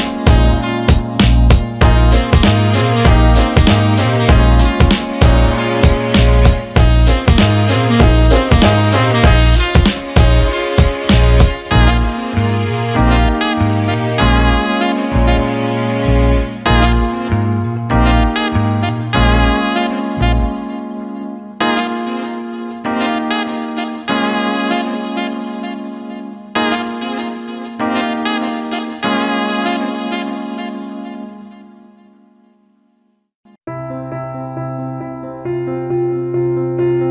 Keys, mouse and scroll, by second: 11.3 alt+middle click, 12.0 click, 12.4 alt+middle click, 14.6 click, 15.9-16.6 right drag, 17.0 alt+middle drag, 17.3 alt+shift+middle drag, 17.6 alt+middle drag, 18.5-19.1 right drag, 20.1 click, 20.6 alt+middle drag, 21.0 alt+shift+middle drag, 22.0 alt+shift+drag, 22.0 alt+shift+middle drag, 22.7-28.0 drag, 28.0 Tab, 28.6 middle click, 29.9 click, 30.0 click, 31.5 click, 32.2-35.0 drag, 35.0 middle click, 35.3 ctrl+z, 36.2 click.